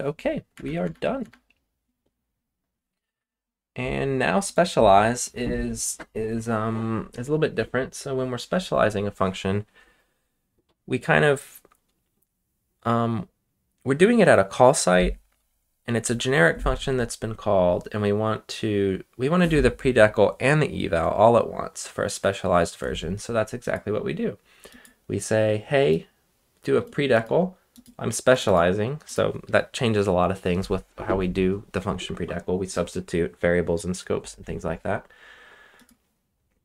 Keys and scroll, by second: 0.5 BackSpace, 0.8 BackSpace, 1.2 BackSpace.